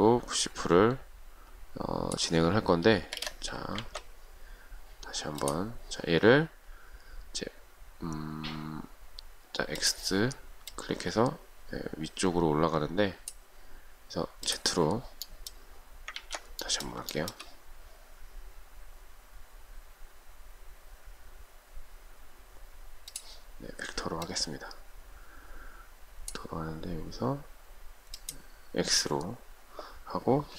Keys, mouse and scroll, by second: 3.3 space, 3.4 Escape, 16.4 ctrl+z, 17.4 shift+middle click.